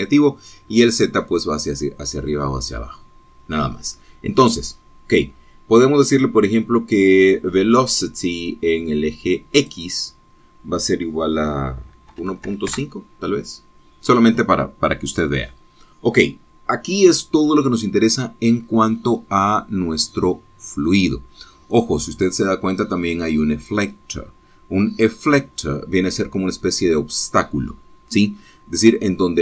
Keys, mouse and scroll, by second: 10.9 click, 13.4 KP_1, 13.6 KP_Decimal, 13.8 KP_5, 14.0 KP_Enter, 23.0 click.